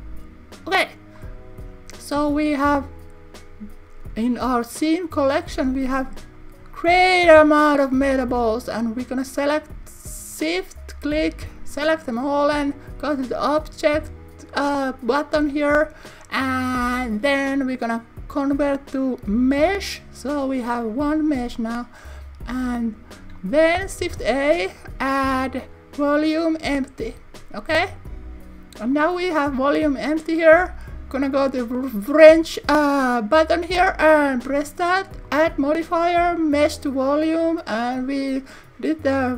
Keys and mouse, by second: 13.4-14.6 drag, 15.3-19.7 drag, 22.5 click, 24.0 shift+a, 29.8 click, 35.3-36.6 drag, 37.8 click.